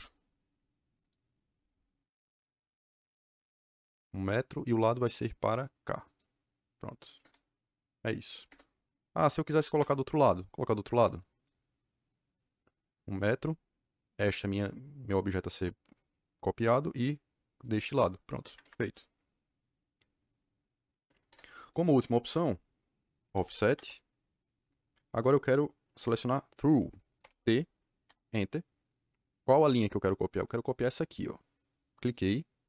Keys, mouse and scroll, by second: 1.0 click, 6.0 click, 7.2 KP_Enter, 8.4 KP_Enter, 9.6 o, 9.7 Return, 13.0 KP_Enter, 14.1 click, 17.5 click, 18.4 Escape, 18.5 Escape, 21.2 KP_Enter, 23.3 o, 23.6 Return, 27.1 shift+t, 28.0 Return, 32.0 click.